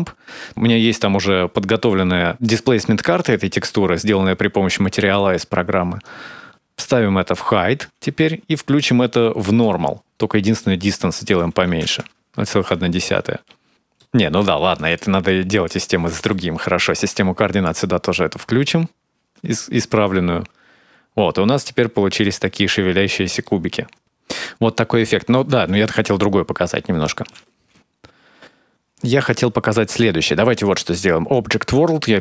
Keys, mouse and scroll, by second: 0.1 click, 4.2-4.6 scroll down 4, 4.5 middle click, 5.8 click, 9.4 click, 10.5 click, 12.4-12.8 scroll up 3, 13.4 space, 13.7 middle click, 14.5 click, 15.1 click, 15.9 middle click, 16.8 click, 18.8-19.2 scroll down 4, 19.2 space, 19.9-21.3 scroll up 3, 21.3-21.7 scroll down 1, 22.0 scroll up 1, 22.2 middle click, 22.8-23.7 scroll down 6, 23.1-23.7 scroll up 2, 23.8 click, 24.0 shift+middle click, 24.0-24.7 scroll down 2, 24.8 shift+middle click, 27.1 space, 28.7 scroll up 1, 30.3 click.